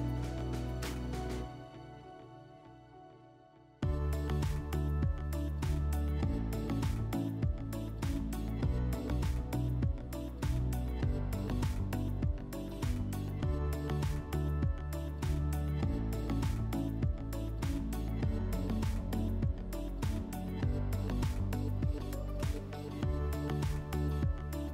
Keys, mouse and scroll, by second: 0.2 click, 5.7 click, 6.9 click, 8.9 click, 9.9 click, 11.4 click, 13.3 click, 14.8 m, 17.1 click, 18.0 click, 20.4 click, 22.3 click, 23.6 click, 24.6 click.